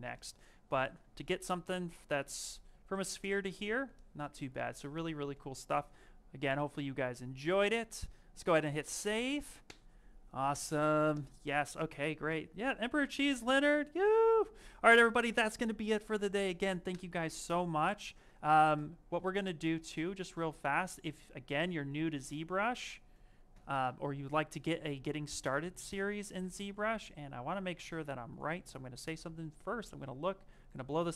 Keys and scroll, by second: 1.6 Escape.